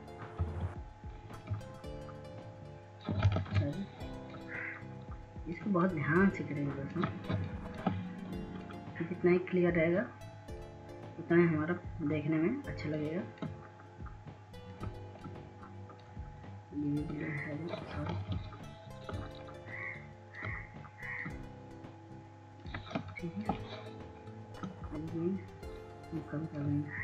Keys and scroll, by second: 4.6 [, 4.8 [, 7.6 ctrl+z, 11.6 ctrl+z, 12.2 ctrl+z, 22.4 ctrl+z.